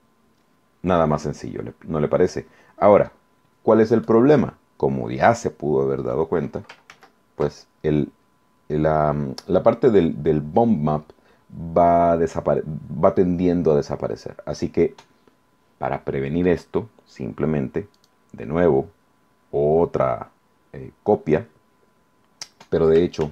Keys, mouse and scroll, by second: 6.9 ctrl+z, 17.9 click, 23.2 ctrl+z.